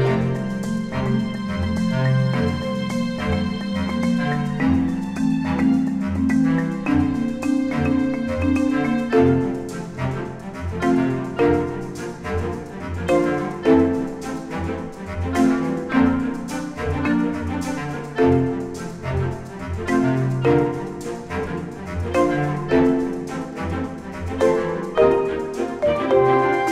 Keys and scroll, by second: 3.0 ctrl+z, 4.8 ctrl+s, 7.7 ctrl+shift+z, 10.3 ctrl+s, 12.7 ctrl+z, 13.2 ctrl+z, 17.2 ctrl+z, 17.9 Delete, 26.2 ctrl+shift+KP_Add.